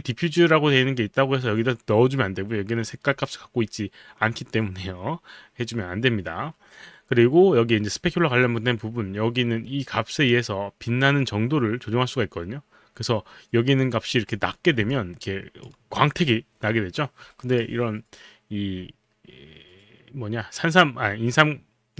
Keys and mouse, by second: 10.3 click, 14.9 alt+click, 15.7 alt+right click, 16.2 alt+click, 16.6 alt+click.